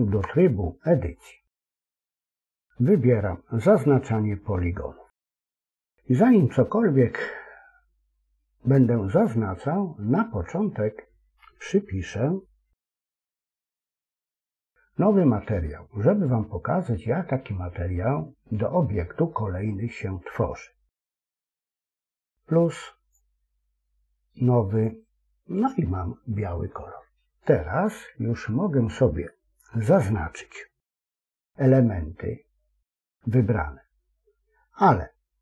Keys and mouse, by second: 22.9 click, 24.7 click.